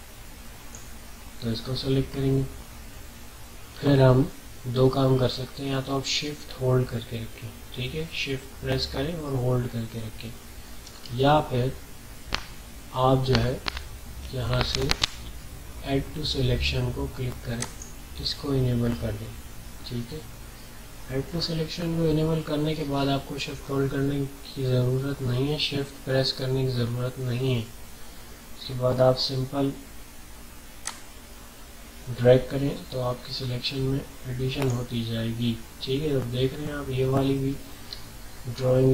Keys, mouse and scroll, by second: 17.6 click, 17.6 typing, 30.8-37.2 drag.